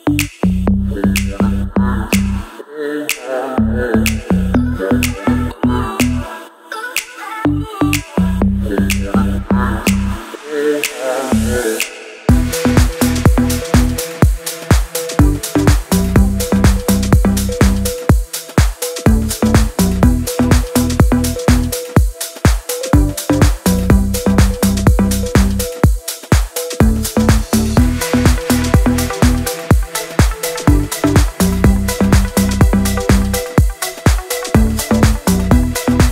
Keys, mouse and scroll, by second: 1.0 scroll down 1, 1.2-2.0 scroll up 1, 2.0-3.2 scroll down 1, 5.2-8.3 scroll down 1, 10.2 click, 10.7 shift+click, 11.2 click, 12.3 Down, 12.7 click, 13.2 Caps_Lock, 13.4 click, 14.9 click, 16.8-17.4 scroll down 2, 17.4 click, 17.8-18.1 scroll up 2, 19.8 alt+click, 21.9 ctrl+z, 22.4-23.4 click, 23.7 Right, 25.8 Up, 26.2 ctrl+[, 27.5 ctrl+], 29.0 ctrl+c, 29.0 ctrl+v, 30.2-30.7 click, 31.0 Right, 31.5-32.0 click, 32.2 Right, 33.2 ctrl+[, 34.5 Right, 35.4 Down, 35.9 Right.